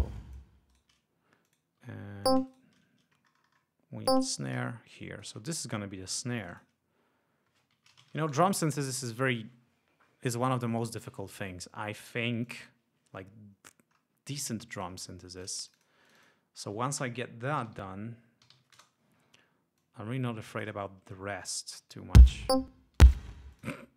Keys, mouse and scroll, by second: 0.7 shift+right click, 1.5 click, 1.8 e, 2.3-2.8 shift+drag, 2.5 shift+right click, 4.1 shift+click, 4.9 shift+click, 5.4 ctrl+scroll down 2, 6.1 ctrl+g, 6.4 ctrl+click, 7.5-8.7 typing, 12.5 click, 14.8 click, 15.4 click, 17.4-19.1 typing, 19.9-20.9 drag, 21.8 click, 22.3 space, 23.1 space, 23.6 click.